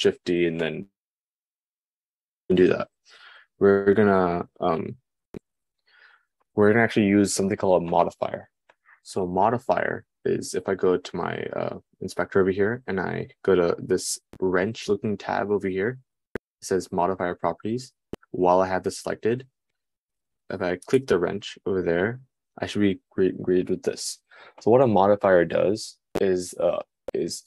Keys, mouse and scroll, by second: 2.8 super+z, 21.3 right click, 21.7-27.4 middle drag.